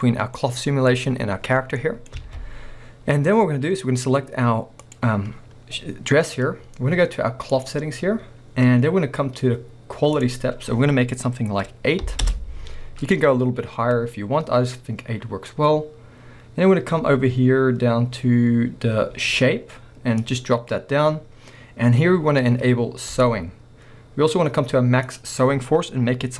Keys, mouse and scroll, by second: 1.6 scroll down 2, 2.2 alt+a, 2.6 scroll up 2, 4.8 click, 7.6-23.2 drag, 12.3 Return, 16.6-18.8 scroll down 1, 20.6-23.2 scroll down 1, 25.1-26.3 drag.